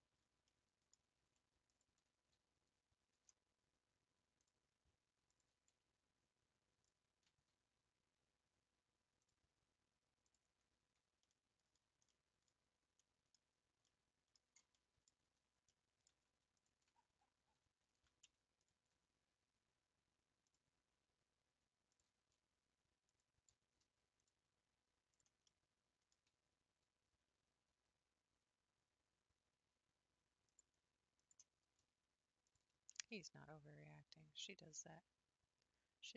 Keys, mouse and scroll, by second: 1.8 alt+Left, 5.4-6.9 drag, 10.3 click, 10.7 scroll down 2, 10.8 Tab, 11.2-11.7 middle drag, 11.7-12.1 scroll down 3, 12.1-12.4 middle drag, 12.4-13.0 scroll down 4, 13.0-13.5 middle drag, 13.5-13.9 scroll up 3, 13.9-15.2 middle drag, 15.2 Tab, 15.5 scroll up 2, 15.7 middle click, 16.7 alt+click, 17.1-17.5 scroll up 1, 17.9 1, 18.7 alt+click, 19.2-20.5 scroll up 1, 22.0-23.2 drag, 25.2 click, 25.4 middle click, 26.1 scroll down 2, 26.9-27.8 scroll up 2, 27.8 s, 31.3 Left, 33.0 g.